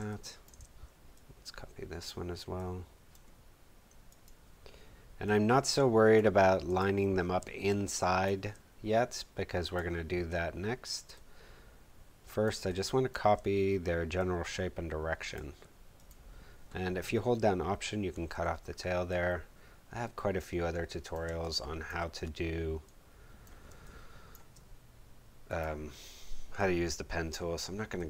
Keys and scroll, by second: 7.4 space, 12.5 space, 21.2 space, 23.6 space.